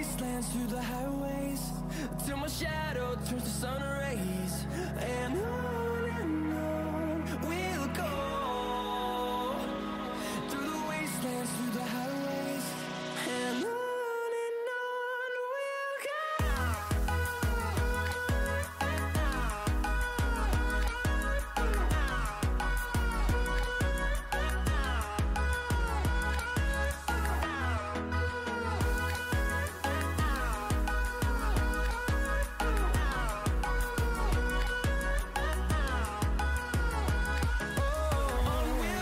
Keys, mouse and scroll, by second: 2.1 click, 2.5 click, 6.7 click, 10.4 click, 17.0-22.0 drag, 22.0-23.9 scroll down 1, 23.9 click, 31.1 click, 31.4-35.3 drag.